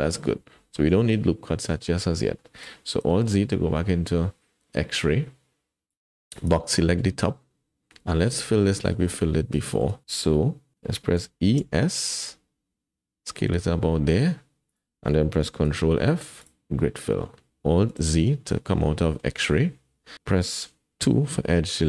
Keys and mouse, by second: 0.9 KP_1, 2.4 shift+middle click, 3.1 alt+z, 5.9 click, 8.1 middle click, 8.9 shift+middle click, 9.7 shift+middle click, 11.2 e, 15.7 ctrl+f, 18.0 alt+z, 18.8 click, 20.2-21.8 middle drag, 21.0 2.